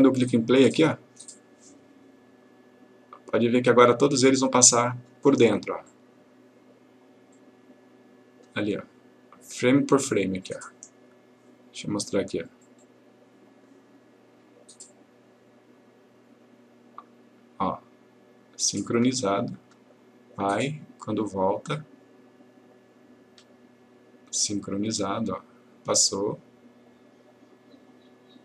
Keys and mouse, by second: 6.0 click, 10.5-11.4 click.